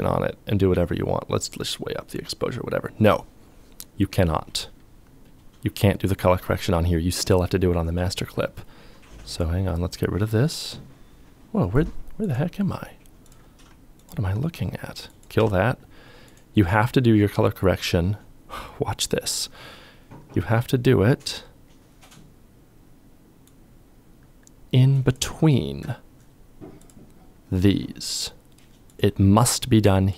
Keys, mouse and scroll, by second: 13.1 alt+click, 14.5 c.